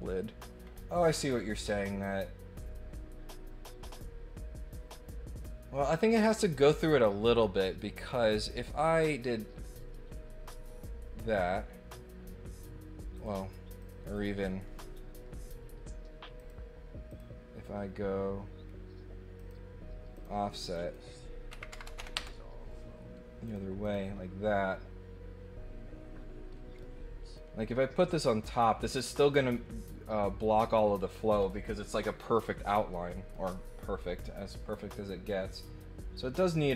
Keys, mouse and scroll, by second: 0.6-1.4 scroll up 4, 8.1 click, 8.1 middle click, 9.1 click, 13.1 click, 13.7 click, 16.3 click, 17.0 click, 19.3 click, 20.1 click, 20.7 click, 23.4 click, 23.8 click, 26.8 middle click, 28.4 middle click, 33.1 middle click, 35.3 scroll up 1, 36.6 click.